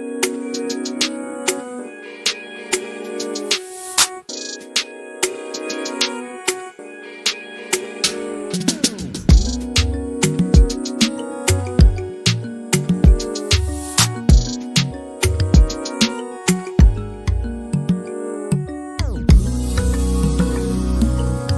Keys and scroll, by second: 5.8 m, 8.0-8.4 typing, 8.7 Return, 9.8-15.2 typing, 10.2 Return.